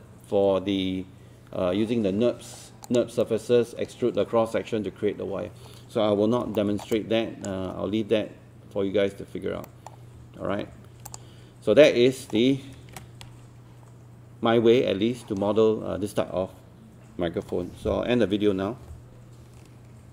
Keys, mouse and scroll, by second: 2.9 click, 6.6 alt+middle click, 6.9 alt+click, 9.7 alt+middle click, 10.5 alt+5, 11.1 click, 11.9 alt+middle click, 12.9 ctrl+space, 14.1-15.0 scroll down 1.